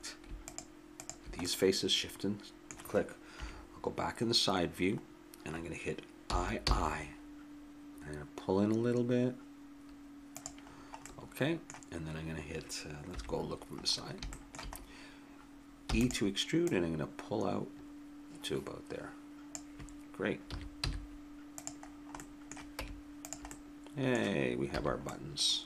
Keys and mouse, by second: 1.9 click, 2.7 middle click, 3.3 KP_3, 6.2 i, 11.0 middle click, 11.5-13.1 middle drag, 13.1 KP_1, 13.8 middle click, 15.8 e, 20.5 a, 20.8 z, 22.2 middle click, 22.8 Tab, 23.5 middle click, 24.7 a.